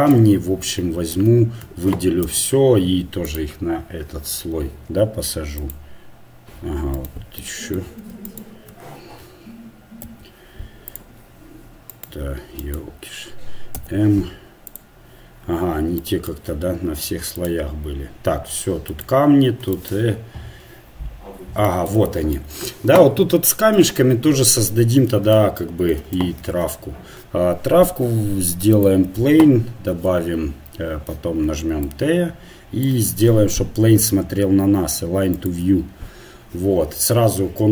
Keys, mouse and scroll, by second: 2.2 m, 5.6-8.3 drag, 7.1-10.0 right drag, 10.0 m, 12.0-14.7 right drag, 16.0-17.4 middle drag, 17.4-23.8 drag, 23.8 KP_1, 26.4 shift+a, 28.8-30.0 drag, 30.0 t, 30.9-32.2 drag, 35.4-37.7 drag.